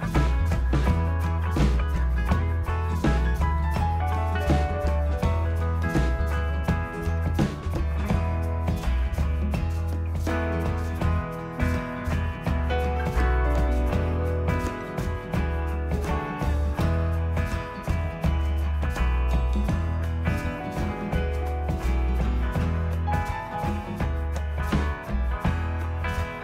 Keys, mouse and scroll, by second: 2.8 right click, 3.6 click, 5.3 click, 5.9 click, 17.6 click, 18.9 click, 25.1 click, 25.3 click.